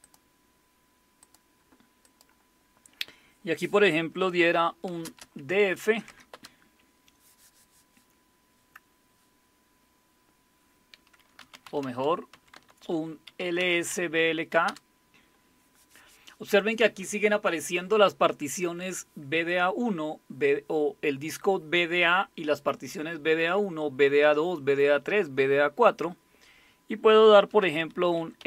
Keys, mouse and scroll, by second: 0.0 click, 1.2 click, 2.0 click, 4.5-6.1 typing, 6.3 Return, 11.1-14.4 typing, 14.7 Return, 27.6-28.4 typing.